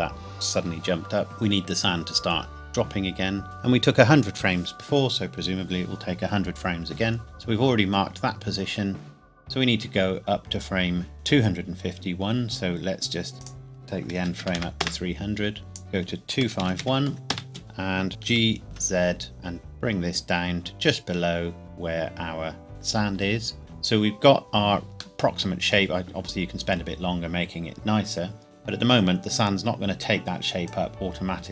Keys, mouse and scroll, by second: 13.4 click, 14.2 KP_3, 14.4 KP_0, 14.8 KP_Enter, 15.7 click, 16.4-18.7 typing, 17.3 KP_Enter, 22.7 scroll up 1, 23.2 scroll down 1, 23.6 click, 25.2 middle click, 30.6 click.